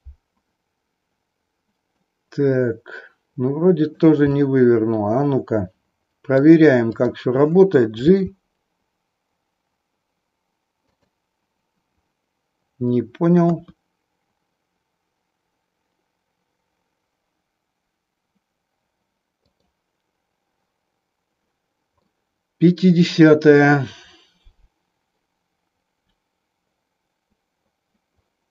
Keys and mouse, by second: 2.0-4.0 middle drag, 4.3-6.5 middle drag, 7.0 click, 8.1 g, 11.0 click, 13.3 KP_3, 19.5 click, 22.0-23.2 middle drag.